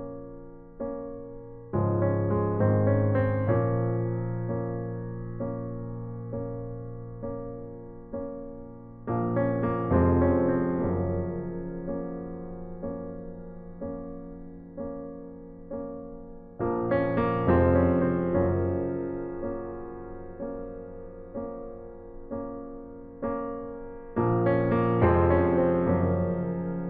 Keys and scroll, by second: 11.0 ctrl+t, 15.1 Return.